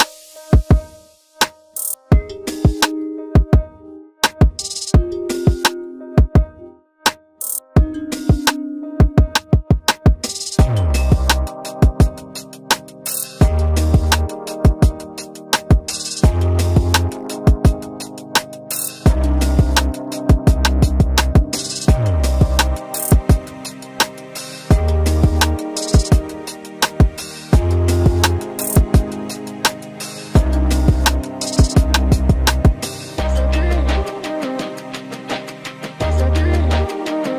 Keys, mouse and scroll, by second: 0.7 ctrl+v, 4.0 ctrl+x, 5.3 ctrl+v.